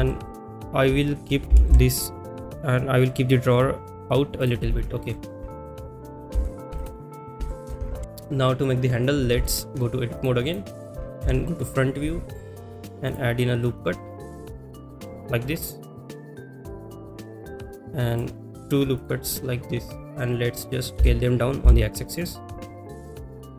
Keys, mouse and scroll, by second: 0.2 shift+middle click, 3.8 g, 3.8 y, 4.1 click, 4.4 click, 5.1 middle click, 6.4 shift+middle click, 7.0 middle drag, 7.5 shift+middle drag, 10.2-10.5 drag, 11.2 KP_1, 13.0 click, 13.8 click, 19.0 click, 20.0 click.